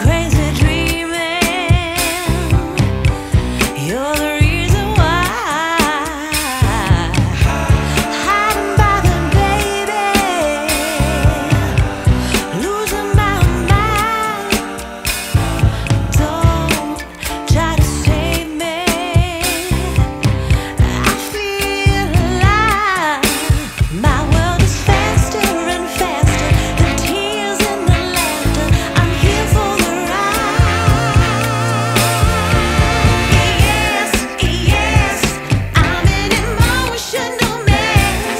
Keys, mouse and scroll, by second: 4.7-6.8 scroll down 1, 7.8 middle click, 11.8 middle click, 12.0 scroll down 1, 23.9 middle click, 28.7 double click.